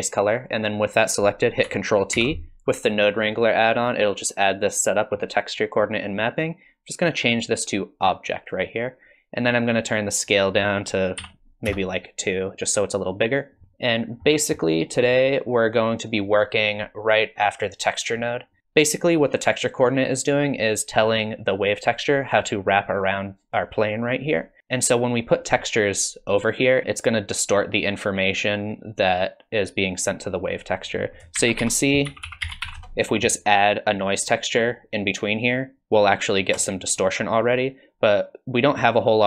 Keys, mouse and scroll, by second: 0.2 click, 2.2 ctrl+t, 2.7 middle click, 7.4 click, 10.2 click, 13.6 middle click, 13.6 click, 13.6 scroll down 3, 14.3 middle click, 15.0 click, 15.7 click, 30.9 click, 31.4 shift+a.